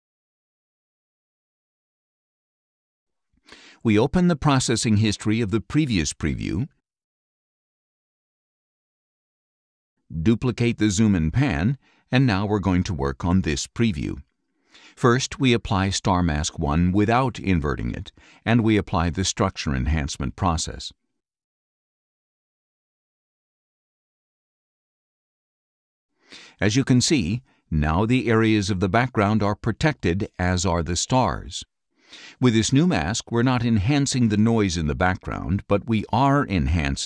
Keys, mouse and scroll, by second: 2.5 click, 3.7 right click, 5.6 click, 7.3 click, 9.7-11.9 drag, 13.1 click, 15.9 click, 17.3 click, 18.8 click, 20.2 click, 22.3 click, 26.0 click, 29.9 click, 30.5 click, 33.8 click.